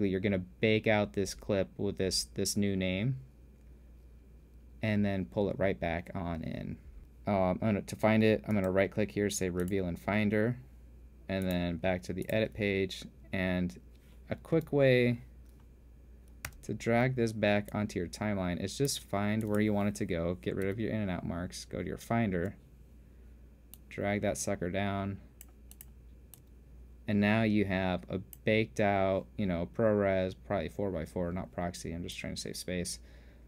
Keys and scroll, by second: 15.2 End, 17.1 g, 21.3 super+Tab.